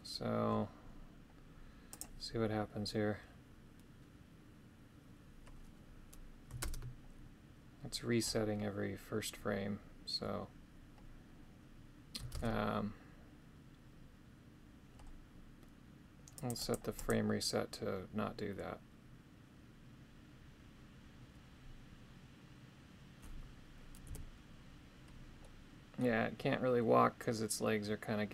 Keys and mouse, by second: 1.9 click, 6.7 shift+space, 12.4 shift+space, 16.4 click, 16.7 click, 17.0 click, 24.1 KP_3, 25.4 middle click.